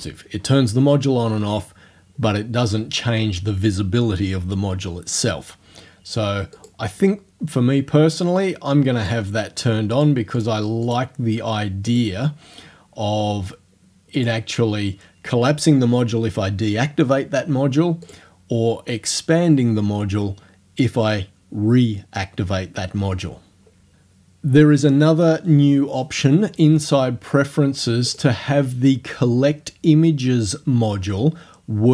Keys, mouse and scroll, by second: 6.6 click, 8.4 click, 10.0 click, 10.4 click, 10.9 click, 11.9 click, 13.9 middle click, 14.2 click, 14.5-17.1 scroll up 2, 18.1 click, 28.1 click.